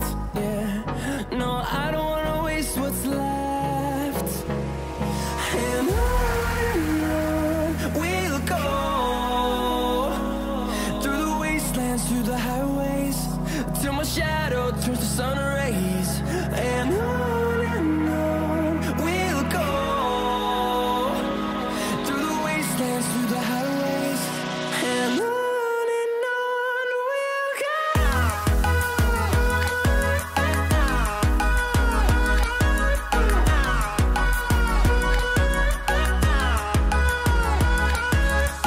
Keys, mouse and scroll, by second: 1.0 r, 4.2-13.0 drag, 13.3-18.4 drag, 20.6 scroll down 1, 21.2 scroll up 1, 21.7 click, 22.6-24.0 scroll up 1, 25.4 click, 25.9 scroll down 1, 26.9-29.4 drag, 29.4 scroll up 1, 30.7-35.0 drag, 35.0 scroll down 1, 35.9-38.6 drag.